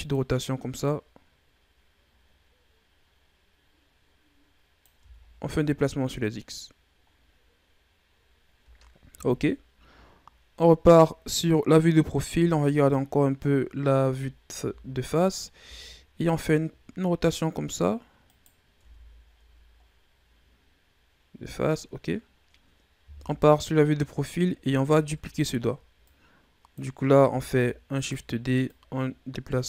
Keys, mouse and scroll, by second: 0.7-3.9 drag, 4.9 Tab, 5.2-6.9 scroll down 8, 6.9-7.9 scroll down 3, 7.9-9.1 scroll up 4, 9.1 KP_3, 10.0 scroll up 5, 12.2 KP_1, 13.6-14.2 shift+scroll up 3, 14.4 Tab, 15.5 r, 18.6 Tab, 19.2-19.7 scroll down 1, 19.7-21.0 scroll down 7, 21.0-21.7 scroll down 3, 22.1-23.0 scroll up 3, 23.0 KP_3, 23.9-24.7 scroll up 6, 24.7 Tab, 25.4-25.9 ctrl+scroll up 1, 25.9-27.4 drag, 27.4 shift+d, 28.5-29.6 drag.